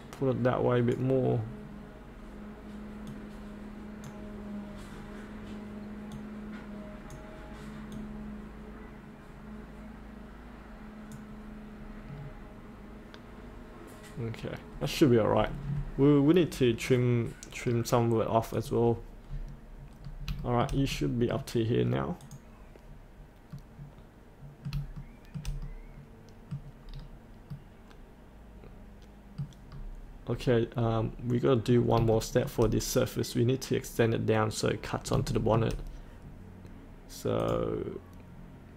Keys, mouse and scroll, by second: 11.8-12.2 scroll up 1, 12.2-14.7 scroll down 1, 14.7-16.9 scroll up 1, 17.6-18.6 scroll down 1, 18.6 click, 19.9-20.3 scroll up 1, 20.4 shift+middle click, 22.2 click, 23.5 middle click, 24.9 shift+middle click, 25.6 middle click, 26.8-27.5 scroll down 1, 27.5-29.6 middle drag, 29.7-30.3 scroll down 1, 30.7 scroll up 1, 31.3 middle click, 32.1 shift+middle click, 33.4 scroll up 1, 35.3 shift+middle click, 37.4 click.